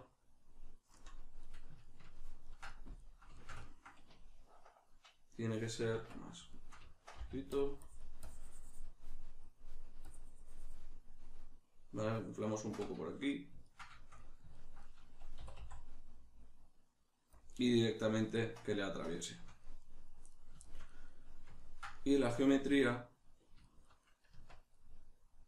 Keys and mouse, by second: 0.9 KP_Decimal, 1.4 middle click, 3.3 shift+middle click, 5.9 Tab, 6.5 shift+middle click, 7.2 f, 7.6 click, 9.0-10.0 middle drag, 10.0 click, 10.9-12.2 middle drag, 12.2 click, 12.6 Tab, 13.0-17.4 shift+middle drag, 15.4 e, 17.4 click, 17.5-25.4 middle drag, 24.4 Tab.